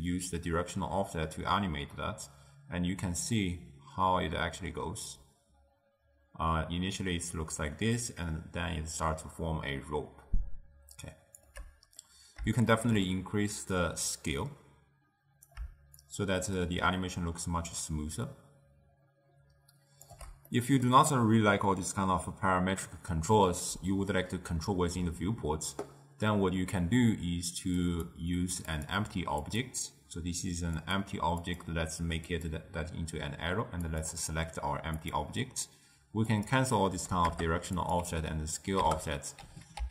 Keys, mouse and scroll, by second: 12.1-13.9 middle drag, 13.9-19.1 drag, 20.6-23.7 middle drag, 28.0 click, 28.8 click, 29.5 click, 30.9 click, 31.5-34.1 drag, 36.4-39.9 drag.